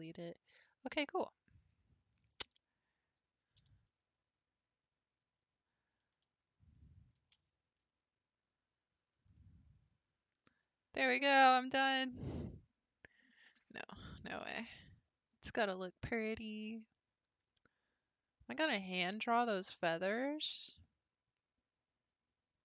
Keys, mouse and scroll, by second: 0.7-1.2 scroll down 7, 1.2-2.8 middle drag, 2.8 click, 3.6 e, 6.2 2, 6.7 click, 7.2 g, 9.4-10.5 middle drag, 10.5-11.0 scroll down 8, 11.1-14.1 middle drag.